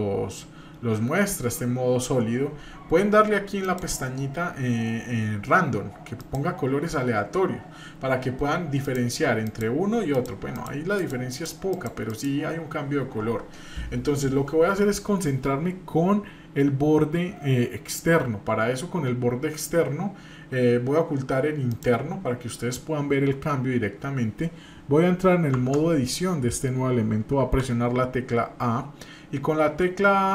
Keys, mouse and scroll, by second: 3.7-6.7 drag, 8.8 click, 9.4 click, 10.1 click, 10.5 click, 11.0 click, 11.3 click, 11.7 click, 12.1 click, 21.7 click, 25.5 Tab, 27.4 a.